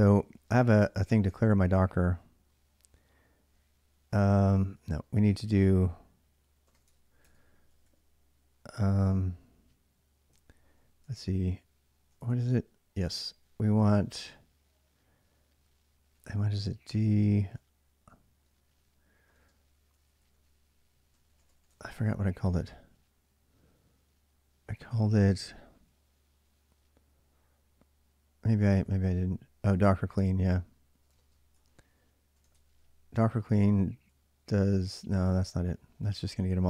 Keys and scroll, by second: 0.1 d, 0.3 space, 0.8 Tab, 1.1 Tab, 4.5 n, 6.2-7.0 typing, 8.3 typing, 10.1 Tab, 11.9 Tab, 12.0 Tab, 12.6-13.3 typing, 15.9 typing, 17.9-22.3 typing, 28.1-32.6 typing, 33.0 Return, 33.9 j, 34.1 j, 34.6 ctrl+[, 34.9 shift+z, 35.1 shift+z.